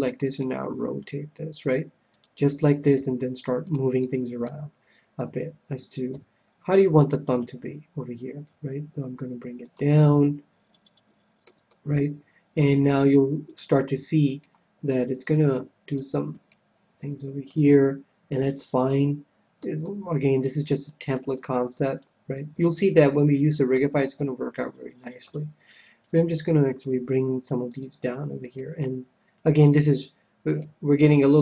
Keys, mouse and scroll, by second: 0.4 r, 2.2-5.4 drag, 3.0 g, 3.9-5.8 middle drag, 6.0 KP_3, 7.2 KP_1, 8.4 g, 9.7-11.2 drag, 9.9-13.4 middle drag, 13.4-15.0 drag, 14.2 right click, 15.4 right click, 15.4 g, 16.0-19.1 drag, 16.3-18.2 right drag, 16.9 g, 18.8 middle click, 19.3-23.1 middle drag, 24.1 KP_3, 25.1 KP_1, 26.0-27.7 right drag, 26.9 g, 27.7-31.4 drag, 28.4-30.2 right drag, 28.9 g, 30.6-31.4 right drag, 30.8 g.